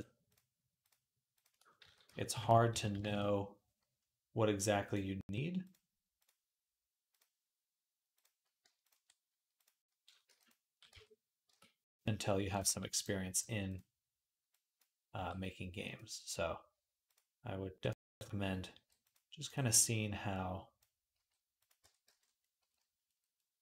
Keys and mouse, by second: 1.7 s, 2.6 s, 5.5-7.0 drag, 7.0-9.5 middle drag, 9.5 click, 10.1 g, 10.4-14.5 middle drag, 10.8 Tab, 11.3 Tab, 12.5 g, 14.5-15.8 drag, 15.0 g, 15.8-16.9 middle drag, 16.9 click, 17.0 middle click, 17.8-19.0 drag, 18.6 g, 19.0-20.2 middle drag, 20.2-21.6 drag, 21.0 g, 21.6-23.6 middle drag, 21.7 Tab, 21.9 z.